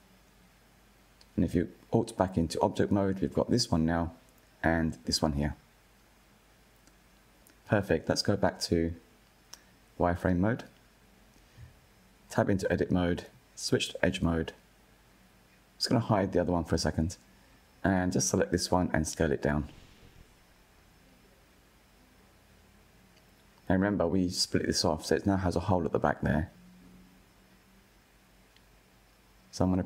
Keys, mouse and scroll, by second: 0.7 Tab, 1.3 click, 2.4 g, 3.7 click, 3.9 g, 5.8 click, 6.8 KP_1, 9.0 click, 9.7-11.7 shift+middle drag, 11.7 Tab, 12.6 2, 15.1 click, 16.5 alt+click, 17.8 s, 21.7 z, 24.5-25.1 middle drag, 25.1-25.5 scroll down 2, 25.5-28.7 middle drag.